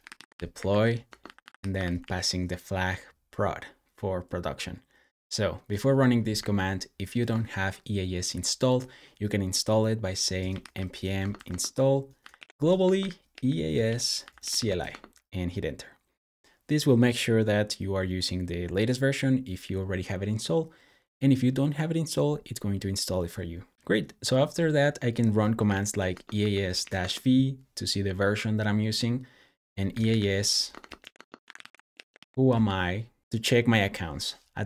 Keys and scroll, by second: 0.0-2.3 typing, 6.0-7.1 typing, 10.1-14.9 typing, 24.8-26.8 typing, 29.5-33.2 typing.